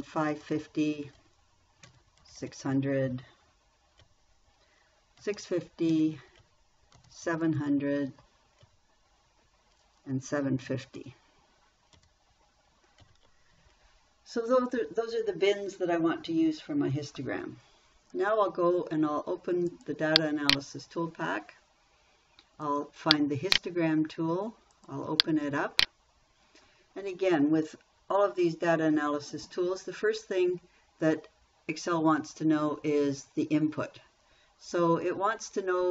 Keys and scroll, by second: 0.2 5, 0.7 0, 1.6 Down, 2.3 6, 2.6 0, 4.5 Down, 5.4-6.3 typing, 6.8 Down, 7.4 7, 7.7 0, 9.1 Down, 11.1 7, 11.4 5, 12.4 0, 13.5 Down.